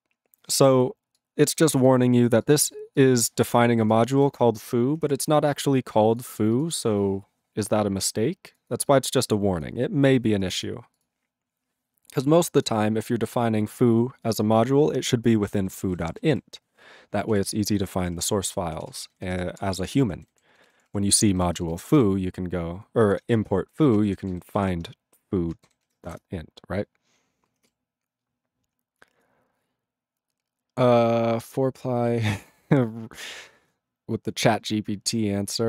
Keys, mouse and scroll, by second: 3.5 click, 3.9 click, 4.1 click, 4.2 click, 12.6 click, 13.0 click, 13.2 click, 14.2 click, 15.5 ctrl+a, 15.7 ctrl+space, 15.8 ctrl+e, 15.9 ctrl+n, 16.0 ctrl+e, 16.1 ctrl+n, 16.2 ctrl+g, 17.3 ctrl+s, 17.8 ctrl+space, 17.8 ctrl+p, 18.0 ctrl+p, 18.1 ctrl+p, 18.2 ctrl+p, 18.4 ctrl+g, 18.8 ctrl+s, 18.9 ctrl+space, 18.9 ctrl+n, 19.1 ctrl+n, 19.2 ctrl+n, 19.3 ctrl+g, 19.5 ctrl+space, 19.6 ctrl+p, 19.8 ctrl+p, 19.9 ctrl+p, 20.0 ctrl+g, 20.1 ctrl+n, 20.3 ctrl+n, 20.6 ctrl+s, 20.7 ctrl+p, 20.8 ctrl+p, 21.1 ctrl+e, 21.3 ctrl+b, 21.4 ctrl+space, 21.8 ctrl+alt+b, 21.9 ctrl+g, 23.4 Return, 24.1 ctrl+p, 24.2 ctrl+p, 24.3 ctrl+b, 25.7 ctrl+g, 26.1 Return.